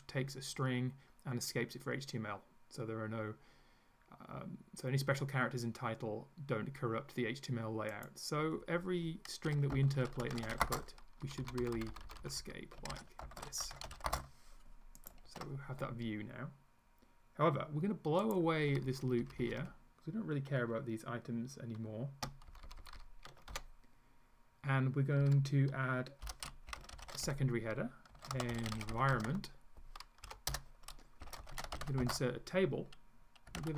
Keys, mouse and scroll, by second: 7.9 click, 9.3-11.1 typing, 11.3 Down, 11.6 Left, 12.7-14.6 typing, 15.0 ctrl+click, 15.3 ctrl+s, 18.2 click, 18.9 Up, 19.2 Right, 19.4 Up, 22.5 shift+Down, 23.5 shift+Delete, 25.3 Left, 26.3 Return, 26.5-29.8 typing, 30.3 End, 30.5 Return, 31.0-33.7 typing.